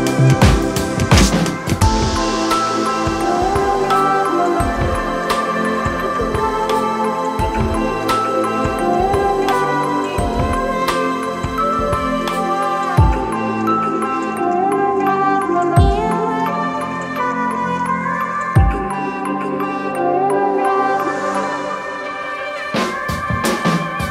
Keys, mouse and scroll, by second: 5.1 shift+click, 14.8 shift+click.